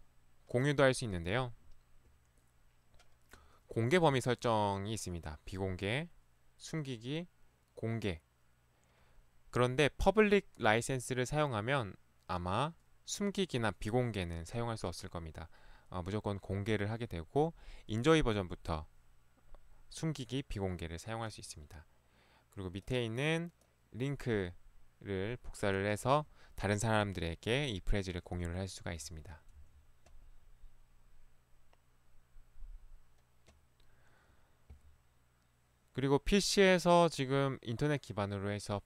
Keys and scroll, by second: 4.1 ctrl+1, 29.1 Escape, 29.6 Escape.